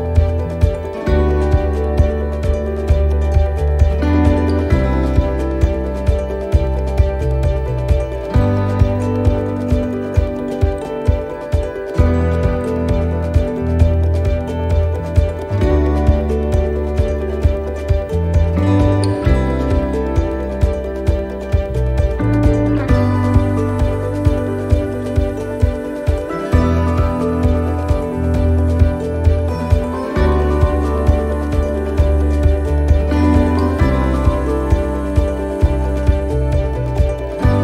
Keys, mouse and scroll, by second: 0.3 right click, 0.9 shift+right click, 1.7 click, 2.9 ctrl+r, 4.3 right click, 4.9 shift+right click, 5.9 click, 7.0 ctrl+r, 8.3 right click, 9.2 shift+right click, 10.3 click, 11.1 middle click, 12.6 ctrl+r, 13.6 middle click, 14.4 alt+shift+right click, 15.5 alt+shift+right click, 15.6 middle click, 16.7 alt+shift+right click, 17.1 middle click, 20.0 e, 22.0 middle click, 23.5 e, 26.3 middle click, 27.1-27.7 scroll up 1, 27.7 middle click, 27.7-28.1 scroll up 1, 28.5 shift+middle click, 29.4 middle click, 31.2 click, 33.3 middle click, 35.9 click, 37.5 middle click.